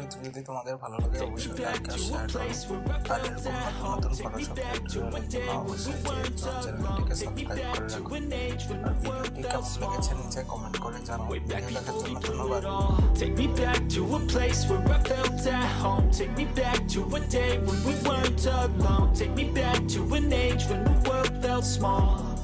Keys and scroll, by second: 8.5 ctrl+a, 8.9 ctrl+c, 9.8 ctrl+v, 10.3 ctrl+t, 13.8 ctrl+a, 14.1 ctrl+c, 16.4 ctrl+v, 18.7 ctrl+a, 19.1 ctrl+c, 20.0 ctrl+v, 20.8 ctrl+t.